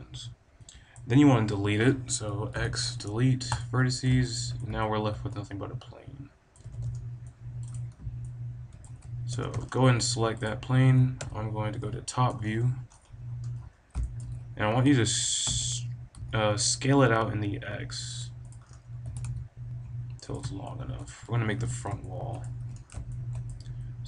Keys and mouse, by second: 2.5 x, 4.2-6.4 drag, 6.6 b, 7.6 click, 8.9 a, 9.3 b, 9.7 click, 10.5-12.1 drag, 11.1 KP_7, 11.7 KP_5, 12.4 middle click, 13.9-15.7 drag, 15.6 s, 15.7 middle click, 18.4 click, 19.0 s, 20.9 click, 23.0-24.0 middle drag.